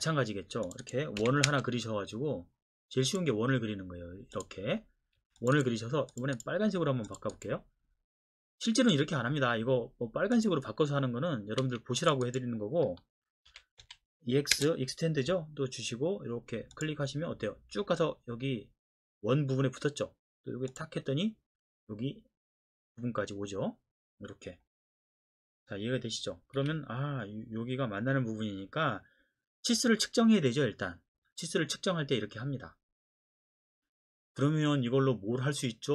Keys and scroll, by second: 1.2 c, 1.5 space, 5.2 Escape, 11.6 Escape, 13.5-14.5 typing, 26.6 Escape.